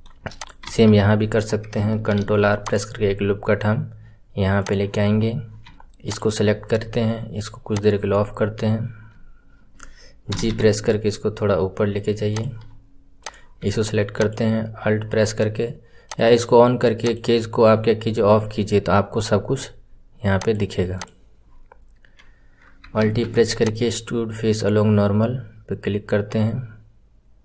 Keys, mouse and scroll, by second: 0.3 click, 1.1-2.1 scroll up 1, 2.1 ctrl+r, 6.0 alt+click, 7.6 click, 13.2-14.3 drag, 16.0 click, 17.0 click, 18.6 scroll up 4, 20.4 click, 20.9 click, 23.0 alt+e.